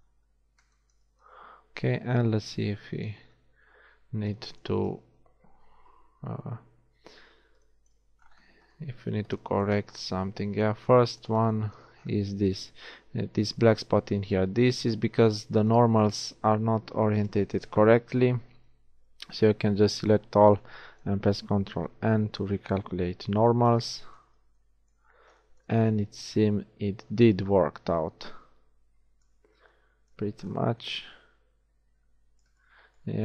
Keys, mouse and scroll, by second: 0.0-1.8 middle drag, 7.2 Tab, 9.2 Tab, 10.4 Tab, 12.8 Tab, 18.0 shift+Tab, 19.0 a, 22.4 ctrl+n, 23.1 Tab, 30.0 middle click, 30.4 middle click, 33.0 shift+middle click.